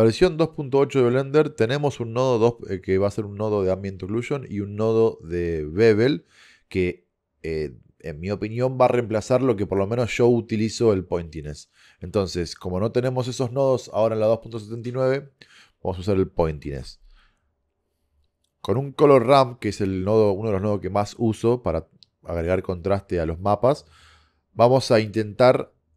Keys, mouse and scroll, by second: 16.7 shift+a, 19.4 click.